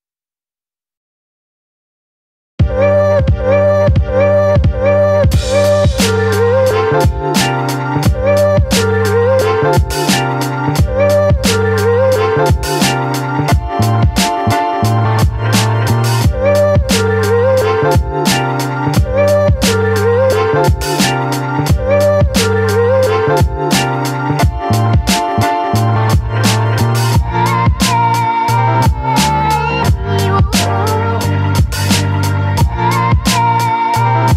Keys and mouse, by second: 2.7 click, 3.4 ctrl+z, 3.6 click, 4.5-6.8 drag, 9.9 click, 9.9 a, 10.3 ctrl+z, 10.5 click, 11.0 ctrl+z, 11.1-13.4 drag, 13.5 ctrl+z, 16.7-18.0 middle drag, 16.8 click, 16.8 right click, 17.6 click, 18.1-19.5 middle drag, 21.2 b, 25.8 click, 26.5 click, 27.0 ctrl+z, 27.3 click, 27.8 ctrl+z, 28.2-33.2 typing, 28.7 click, 29.2 ctrl+z, 29.5 click, 30.1 click, 30.3 click, 30.8 click, 31.9 click, 32.7 click, 33.3 click, 34.3 ctrl+z.